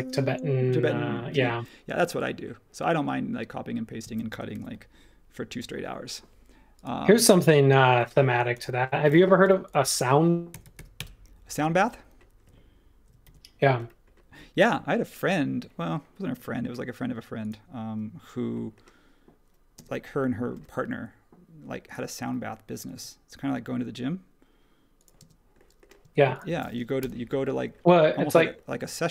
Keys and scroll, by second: 4.5 super+s, 9.4-11.2 typing, 13.2 super+1, 19.7 space, 20.5 m, 25.2 space, 26.0 space, 27.0 BackSpace.